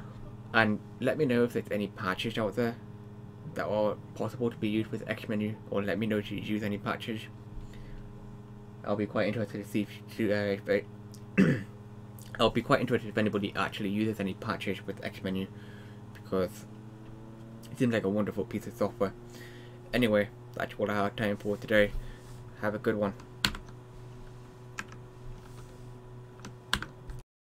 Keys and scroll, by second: 23.5 super+Print, 24.8 Escape, 26.8 super+Print, 27.4 Right.